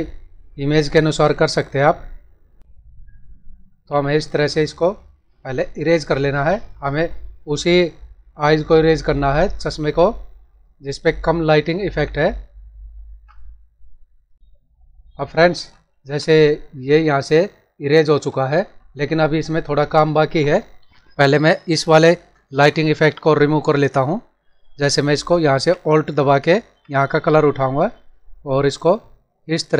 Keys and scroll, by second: 15.6 ctrl+-, 17.1 ctrl+=, 18.5 ctrl+=.